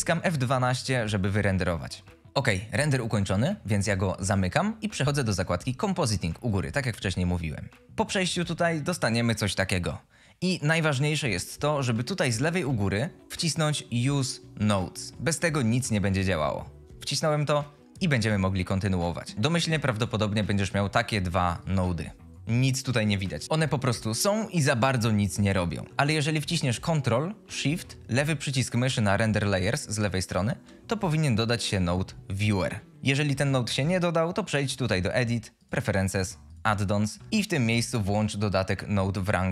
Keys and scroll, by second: 12.9 F22, 18.0 F22.